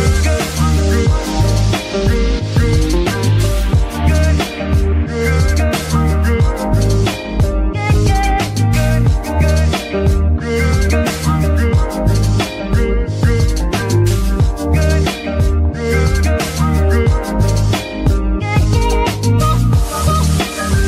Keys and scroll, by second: 3.4 g, 4.2 Escape, 7.4 g, 16.4 ctrl+z, 16.9 ctrl+z, 18.8 Escape.